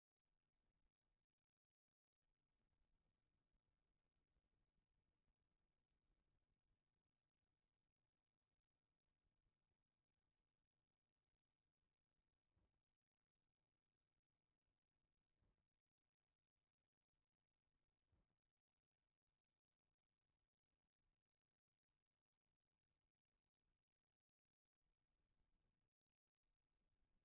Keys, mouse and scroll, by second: 0.0 shift+click, 5.0 click, 6.4 click, 11.2 ctrl+a, 13.2 click, 13.7-14.2 drag, 15.8 shift+click, 20.8 click, 25.8 click.